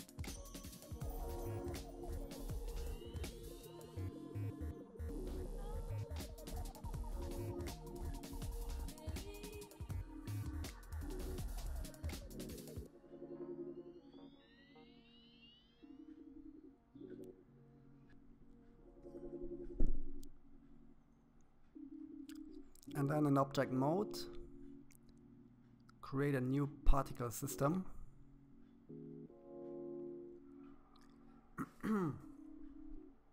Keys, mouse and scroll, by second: 1.3-3.1 drag, 9.6-11.8 middle drag, 12.3-13.6 drag, 13.6-14.2 scroll down 3, 14.2-15.8 middle drag, 16.4 scroll up 1, 16.5-18.1 middle drag, 20.6-22.3 drag, 23.8 click, 27.4 click, 29.2 click, 30.0-31.0 drag.